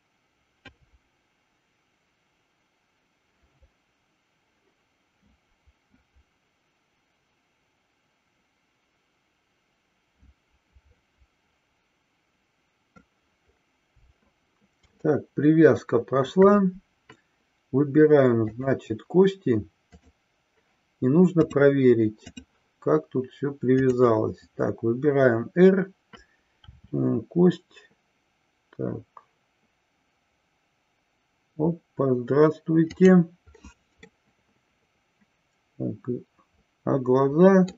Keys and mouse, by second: 15.2-16.5 shift+middle drag, 18.3 click, 19.9 click, 21.3-22.5 drag, 34.2-37.7 middle drag.